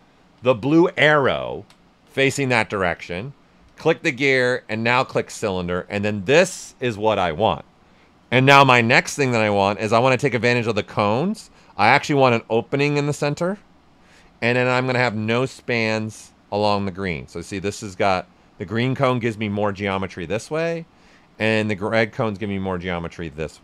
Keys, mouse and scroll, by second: 0.3 typing, 0.4 alt+right click, 3.6 click, 5.6-8.7 right drag, 8.9 right click, 11.5-14.1 drag, 14.1 right click, 15.0-23.6 drag.